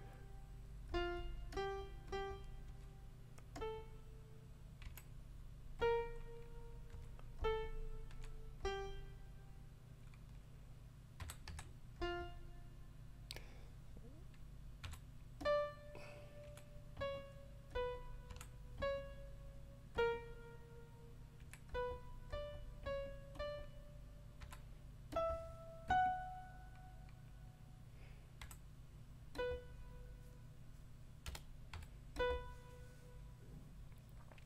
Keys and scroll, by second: 2.6 5, 4.8 4, 6.9 5, 8.1 4, 11.2 5, 11.4 ., 14.8 5, 16.4 4, 18.3 5, 21.4 4, 24.4 5, 28.4 5, 31.2 BackSpace, 31.7 6.